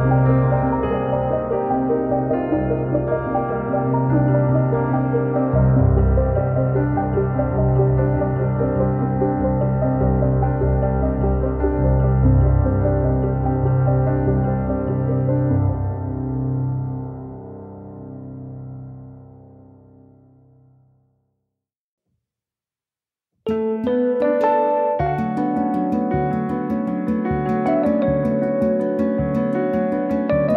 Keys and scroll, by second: 2.7 Delete, 9.6 f, 12.1 space, 13.7 m, 14.8 Up, 16.3 space, 21.0 space, 22.9 Up, 24.7 space, 26.7 f, 28.9 space.